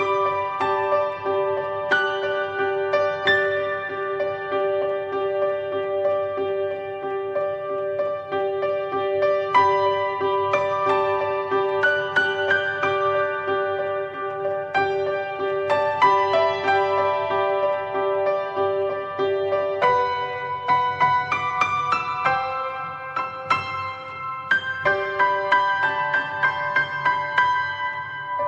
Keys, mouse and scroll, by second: 0.6 scroll down 1, 0.9 click, 2.1 click, 2.6-3.1 drag, 3.1-4.3 middle drag, 4.3 click, 5.5-6.4 middle drag, 6.4 click, 11.6 middle click, 11.9-12.3 scroll up 2, 12.3-13.3 shift+middle drag, 13.3 scroll down 1, 13.5-16.2 middle drag, 16.2 click, 21.5-22.6 middle drag, 22.6-23.1 drag, 23.1 click, 25.0 drag, 26.0 click, 27.9-28.4 middle drag.